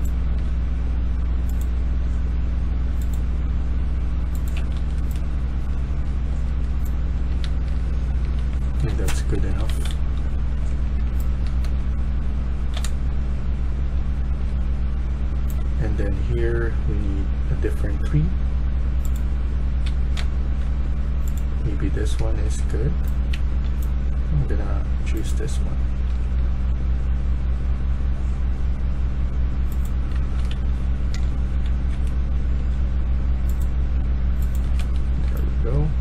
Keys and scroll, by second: 0.0-0.8 typing, 4.4-5.7 typing, 7.3-15.2 typing, 19.6-20.4 typing, 22.1-23.7 typing, 26.0 d, 29.3-32.4 typing, 34.7 Escape, 35.0-36.0 typing.